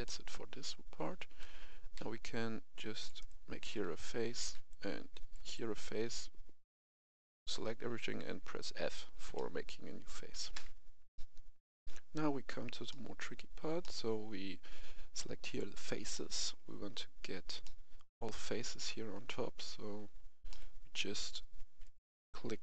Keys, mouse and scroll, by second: 1.0-1.9 typing, 2.1 click, 3.1 right click, 3.6-4.3 typing, 4.6 click, 5.3 right click, 9.2 middle click, 10.5 f, 11.0 middle click, 11.6 F11, 12.8 middle click, 15.4 click, 16.0 middle click, 19.5 KP_1, 20.4 middle click, 21.7 alt+right click.